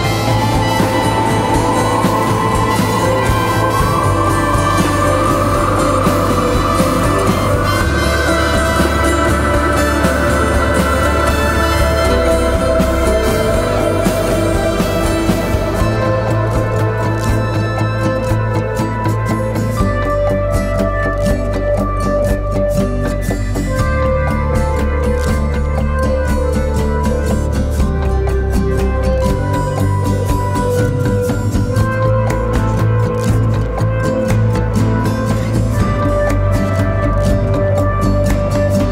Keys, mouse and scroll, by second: 17.6-19.0 scroll down 1.